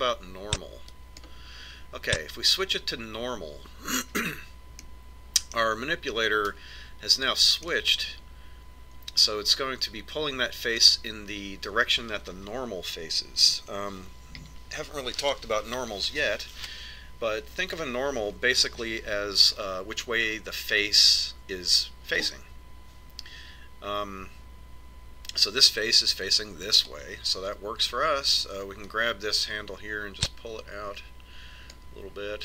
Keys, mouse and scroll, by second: 0.4 click, 5.9-7.7 middle drag, 8.8-10.8 middle drag, 14.6 ctrl+KP_7, 30.1 click.